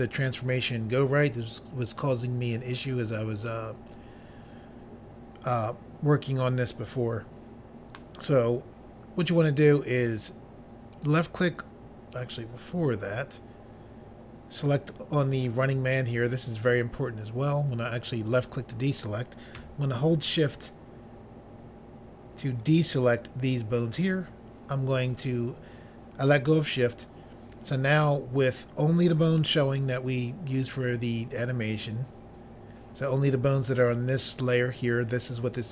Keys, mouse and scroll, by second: 10.9 click, 11.1 click, 14.6 click, 14.7 click, 18.4 click, 18.5 click, 22.6 shift+click, 22.8 shift+click.